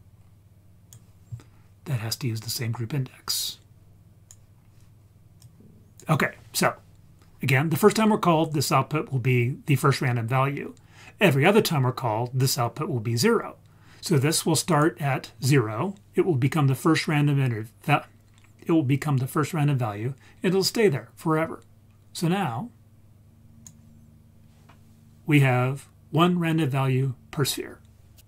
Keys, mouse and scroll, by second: 2.6 click, 2.9-4.3 drag, 4.6-5.4 scroll down 2, 5.4 click, 6.3-7.7 scroll up 2, 14.7 click, 22.2-23.7 drag.